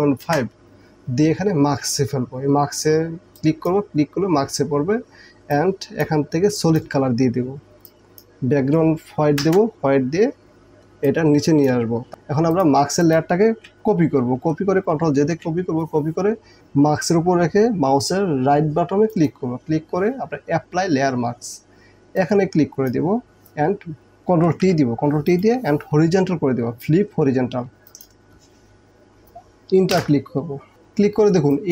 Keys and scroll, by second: 0.3 Return, 9.6 Return, 15.2 ctrl+j, 24.5 ctrl+t, 30.0 Return, 31.2 space.